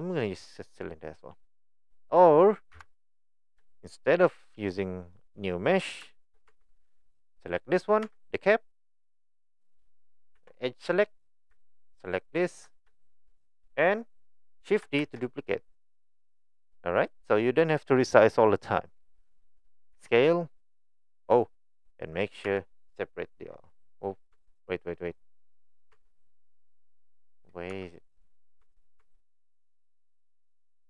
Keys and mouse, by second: 2.7 Delete, 3.9 shift+middle drag, 5.2 middle click, 6.1 shift+middle click, 6.5 Tab, 7.2 click, 8.0 Tab, 10.4 2, 12.2 alt+click, 13.0 shift+middle click, 15.0 shift+d, 19.9 s, 22.4 a, 24.3 Tab, 25.1 right click, 25.9 Tab, 26.9 right click, 27.7 Tab, 28.6 Tab, 29.0 Tab.